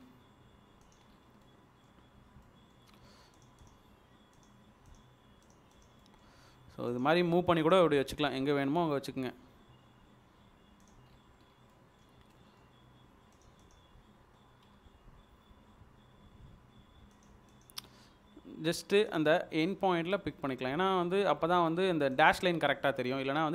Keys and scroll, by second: 11.1 Escape, 14.7 d, 16.2 Escape, 22.5 Escape.